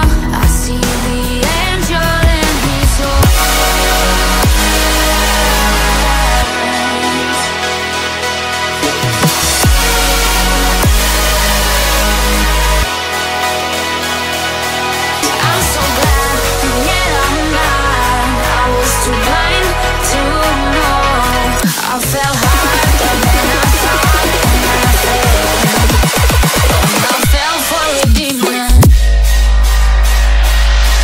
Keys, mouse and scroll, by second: 4.0 middle click, 16.6-17.2 scroll up 4, 18.7-19.2 scroll up 3, 19.8 middle click, 22.1-22.7 scroll down 4, 23.3-23.9 scroll up 1, 26.5-29.2 scroll down 8, 29.3 scroll down 2.